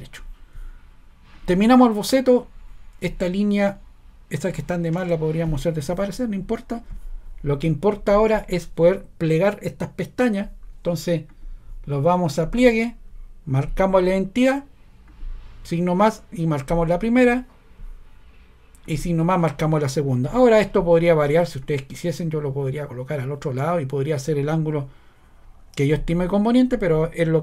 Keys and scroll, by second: 5.0 BackSpace.